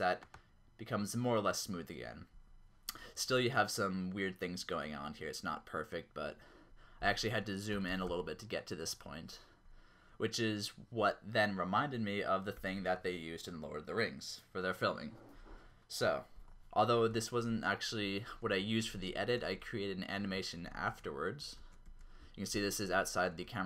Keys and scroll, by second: 7.9-8.2 typing, 10.9 typing, 12.5 ctrl+z, 17.1 0, 18.6 q, 19.6 q, 20.7 shift+q, 21.6 shift+q, 22.9-23.5 typing.